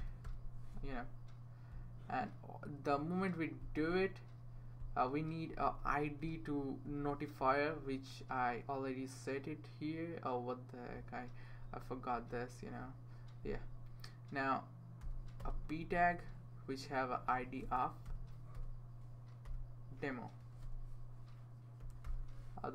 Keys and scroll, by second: 0.0-0.2 typing, 5.8 Return, 6.8 Return, 15.0 typing, 15.4 Return, 17.1 Left, 17.6-18.5 typing, 19.4 Return, 20.1-22.3 typing.